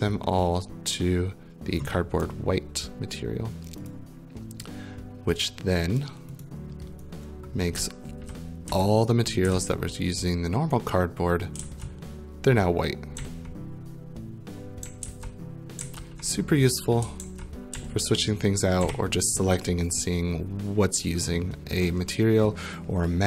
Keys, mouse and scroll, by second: 1.8 click, 3.9 click, 6.4 click, 7.8-9.5 typing, 9.0 right click, 9.7 right click, 11.3-12.1 typing, 13.2-19.3 typing, 19.5 right click, 20.9 right click.